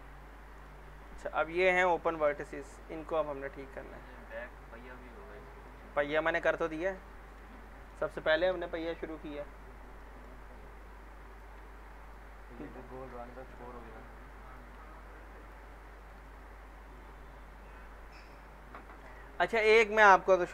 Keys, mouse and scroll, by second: 0.0 scroll up 2, 0.3-0.9 alt+middle click, 1.3 alt+middle click, 2.4 alt+middle click, 4.2 click, 4.8 scroll up 1, 5.3 scroll down 1, 6.0 alt+middle click, 6.1 middle click, 10.0 alt+middle click, 10.4-11.3 scroll up 1, 11.3 click, 12.0 ctrl+click, 12.9 ctrl+shift+e, 13.3 alt+middle click, 13.8 scroll up 1, 14.5 click, 15.4 ctrl+click, 15.8 ctrl+shift+e, 16.2-17.2 alt+middle drag, 18.2 click, 18.8 scroll down 1, 19.1 alt+middle click, 19.2-19.8 alt+middle drag.